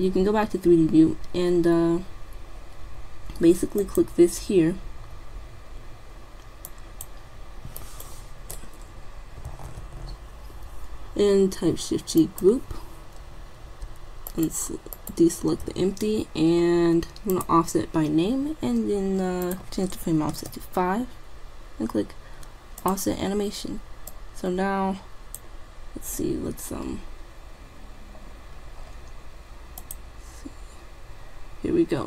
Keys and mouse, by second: 4.1-5.7 drag, 6.7-9.5 drag, 7.9 right click, 14.4-16.9 drag, 16.9 middle click, 17.6-18.9 drag, 19.1 click, 19.5-21.3 drag, 22.8 click, 25.3 click, 27.7-30.2 middle drag, 30.2-31.5 drag.